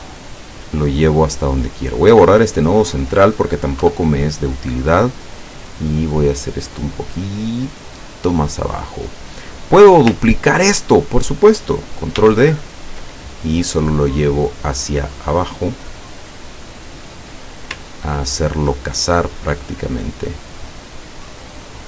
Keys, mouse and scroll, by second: 1.0 click, 1.6 click, 2.0 click, 3.1 click, 3.9 Delete, 6.2-8.8 drag, 9.6 click, 10.4 ctrl+scroll down 1, 12.2 ctrl+d, 13.1-17.8 ctrl+drag, 18.0-18.5 ctrl+scroll up 1, 19.2-21.8 drag.